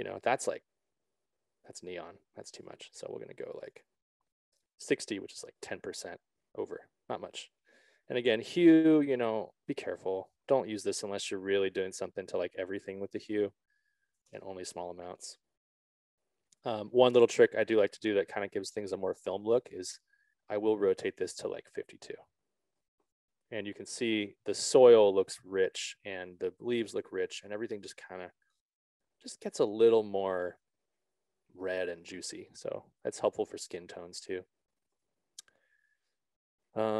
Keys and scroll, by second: 4.1 a, 4.8 0, 4.9 Return, 10.8 Return, 11.3 z, 13.6 ctrl+a, 14.4 5, 15.0 Return, 24.3 5, 25.0 Return.